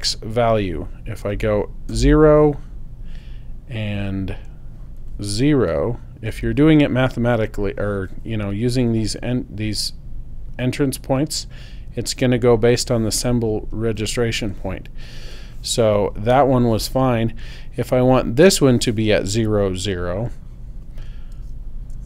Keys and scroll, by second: 1.3 0, 1.9 Return, 5.8 0, 6.3 Return, 21.4 0, 21.9 Tab.